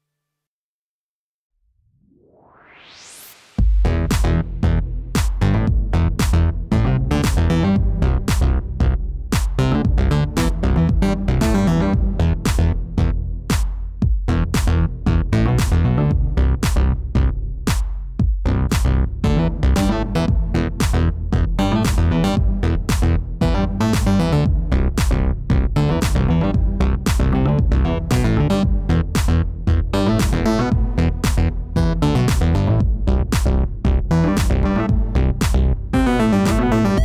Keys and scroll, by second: 24.1 3, 24.8 Return, 27.6 5, 27.9 Return, 31.9 shift+d, 35.4 r.